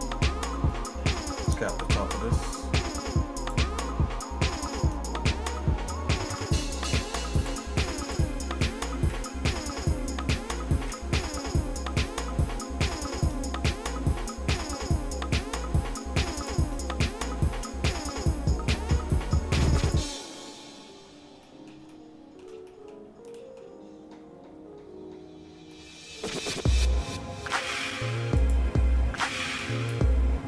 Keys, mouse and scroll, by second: 0.0 click, 0.7 middle click, 1.2 middle click, 1.8 click, 2.0 Tab, 2.8-3.1 scroll up 1, 3.4 click, 5.0 shift+middle click, 6.1 ctrl+Tab, 7.3 click, 8.1 click, 9.1 KP_Divide, 9.9 shift+middle click, 10.8 KP_Decimal, 11.6 shift+middle click, 12.1-12.7 scroll down 4, 12.9 shift+middle click, 13.3 middle click, 13.7-14.6 scroll down 3, 14.6 middle click, 15.0 shift+middle click, 16.3 shift+click, 17.5 x, 20.5 middle click, 20.8-21.2 scroll down 3, 21.1 scroll up 1, 21.4 middle click, 21.9 shift+middle click, 22.7 middle click, 23.3 middle click, 25.7 middle click, 26.4 scroll up 1, 26.5 scroll down 1, 26.5-27.0 scroll up 3, 27.1 scroll down 1, 28.4 click, 29.6 KP_Decimal.